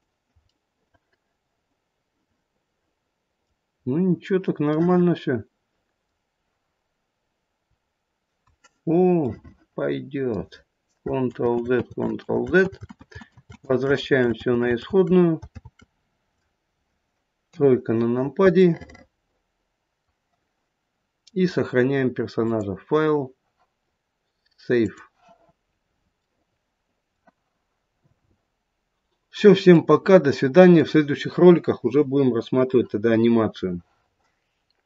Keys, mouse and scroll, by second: 0.5 middle click, 1.0 middle click, 1.8 middle click, 3.2 middle click, 3.7 middle click, 3.7-4.0 scroll down 1, 4.7 middle click, 9.2 middle click, 9.2 scroll down 1, 9.4 middle click, 10.0 middle click, 10.9 middle click, 11.3 ctrl+z, 11.7 ctrl+z, 12.2 ctrl+z, 12.6 ctrl+z, 13.0 ctrl+z, 13.3 ctrl+z, 13.7 ctrl+z, 14.0 ctrl+z, 14.4 ctrl+z, 14.8 ctrl+z, 15.5 ctrl+z, 17.4 KP_3, 18.6 middle click, 22.3 click, 25.7-26.2 scroll up 1, 26.2 middle click, 26.3 middle click, 26.5 middle click, 28.6 middle click, 30.2 middle click.